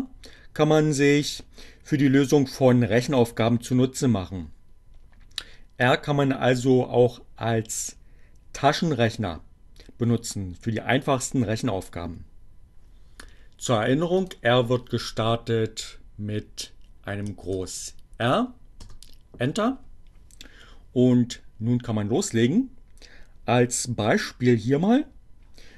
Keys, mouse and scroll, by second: 14.0 click, 16.7 shift+r, 17.0 Return.